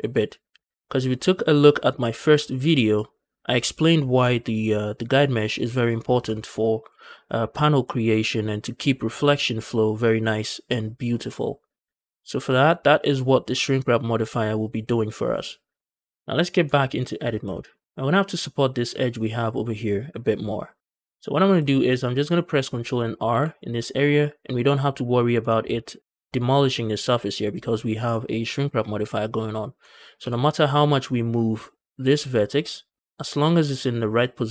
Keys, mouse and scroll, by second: 1.8 click, 2.2 click, 2.8 click, 3.7 shift+middle click, 5.9 scroll down 1, 6.2 shift+middle drag, 6.7 middle drag, 7.2 shift+middle drag, 16.0 middle click, 16.5 Tab, 16.8 middle click, 17.1 scroll up 1, 17.4 shift+middle click, 17.7 scroll down 1, 18.0 middle click, 21.0 middle click, 21.5 shift+middle click, 22.3-22.6 scroll up 1, 22.6 scroll down 1, 23.2 ctrl+r, 25.0 shift+right click, 25.4 shift+middle click, 25.7 middle click, 29.3-29.7 scroll down 1, 29.7 middle click, 30.0 g.